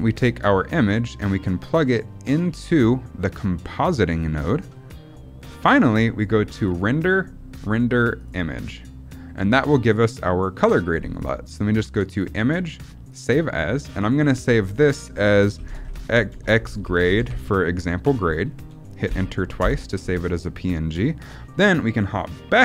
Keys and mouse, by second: 0.0 middle click, 1.7-4.5 drag, 6.5-8.4 drag.